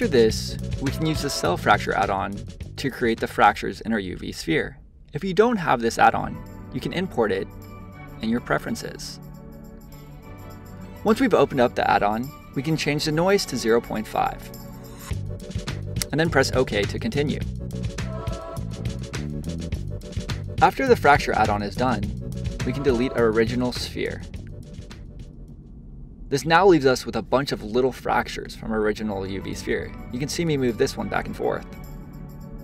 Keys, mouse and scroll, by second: 0.3-3.4 drag, 18.4 middle click, 19.3 middle click, 19.5 click, 21.4-24.4 right drag, 24.4 click, 24.8 middle click, 25.6-26.0 scroll up 2, 26.0-27.4 shift+middle drag, 27.4 click, 31.5 click, 32.0-32.3 scroll down 2, 32.3-32.6 shift+middle drag.